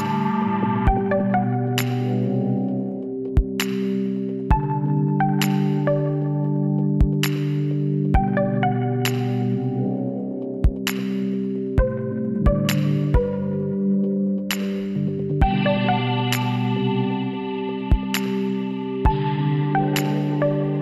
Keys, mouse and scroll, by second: 0.8 middle click, 1.0 KP_1, 4.7 n, 6.5-8.3 drag, 8.8-18.1 drag, 19.2-20.8 middle drag.